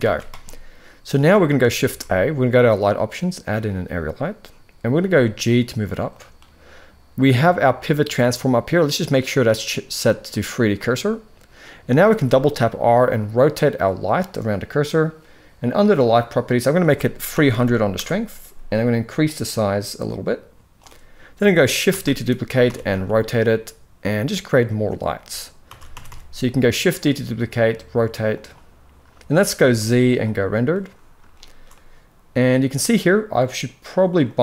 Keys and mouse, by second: 1.5 shift+a, 4.7 g, 7.5-10.6 drag, 11.7 r, 16.5-17.7 drag, 17.3 0, 19.0-20.5 drag, 21.6 shift+d, 25.4 shift+d, 29.3 z, 31.0 shift+middle click, 34.1-34.4 drag.